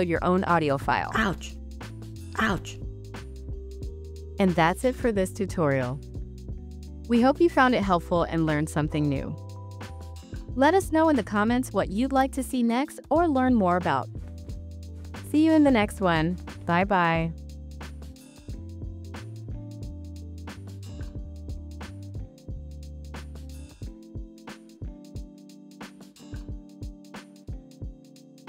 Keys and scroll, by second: 0.0-4.1 typing, 5.6 s, 8.2-12.0 typing, 14.1 space.